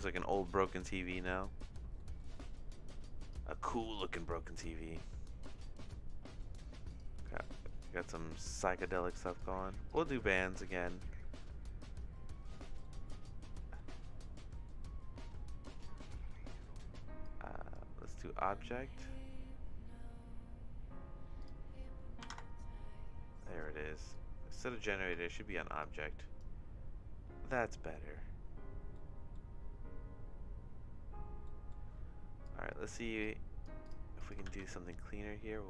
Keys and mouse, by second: 0.8 middle click, 1.2 shift+middle click, 2.0 middle click, 3.2 click, 6.9 click, 8.8 click, 9.2 click, 12.8 middle click, 13.8 middle click, 17.2 click, 21.4-23.6 drag, 24.1 click, 25.3 middle click, 25.8 click, 28.9 middle click, 31.4 middle click, 32.4 click, 33.2 click, 33.8 click, 34.2 click, 34.5 shift+d.